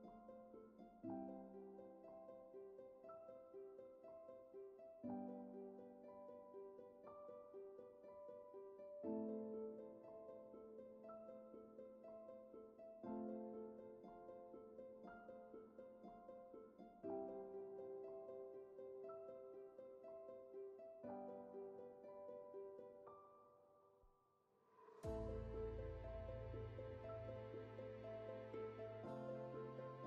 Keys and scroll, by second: 11.1 ctrl+z.